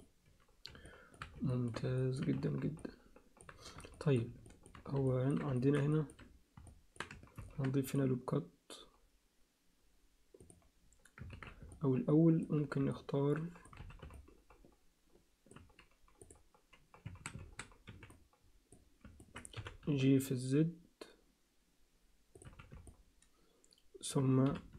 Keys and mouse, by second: 0.8 alt+shift+middle click, 1.5 alt+shift+middle click, 2.0 ctrl+alt+middle click, 2.3 z, 2.8 alt+middle click, 4.0 alt+shift+middle click, 4.5 ctrl+alt+middle click, 5.1 ctrl+alt+middle click, 5.5 alt+shift+middle click, 5.9 ctrl+alt+middle click, 6.7 alt+middle click, 7.3 ctrl+r, 11.3 ctrl+z, 11.7 alt+middle click, 12.9 alt+middle click, 13.8 z, 14.1-15.5 alt+middle drag, 16.2 click, 17.1 a, 17.8 b, 19.2 ctrl+alt+middle click, 19.6 g, 22.4 z, 22.9-24.1 alt+middle drag, 24.5 g.